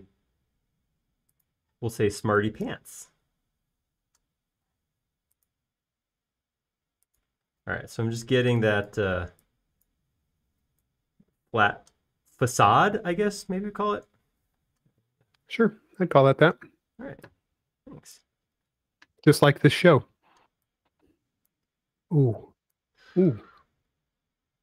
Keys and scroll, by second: 0.0-0.7 typing, 6.1 l, 8.9 e, 16.4 p, 20.1 e, 21.8 typing, 23.5 typing.